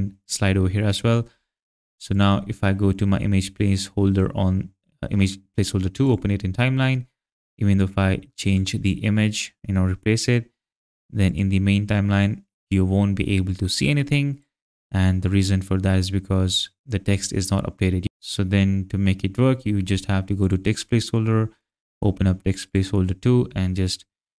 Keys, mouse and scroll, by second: 4.1 right click, 6.0 click, 8.5 click, 11.3 click, 20.4 click, 21.6 right click, 22.7 click, 23.7 click.